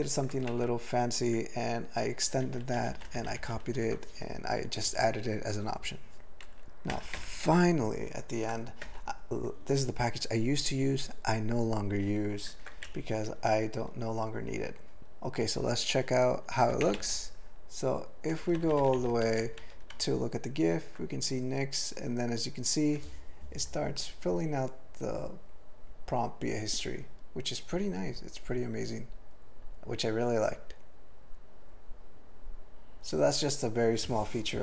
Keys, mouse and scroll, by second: 0.0 ctrl+n, 0.5 alt+m, 2.1 ctrl+alt+f, 2.4 ctrl+alt+b, 2.6 ctrl+alt+f, 2.8 ctrl+alt+b, 2.9 ctrl+alt+f, 3.1 ctrl+alt+b, 3.4 ctrl+alt+f, 3.6 ctrl+alt+b, 5.3 ctrl+alt+f, 7.1 ctrl+n, 7.4 ctrl+l, 8.8 Tab, 12.5 ctrl+e, 12.9 alt+b, 17.0 ctrl+o, 18.3 ctrl+v, 18.5 ctrl+v, 18.6 ctrl+v, 18.8 ctrl+v, 19.0 ctrl+v, 19.3 ctrl+v, 19.9 ctrl+v.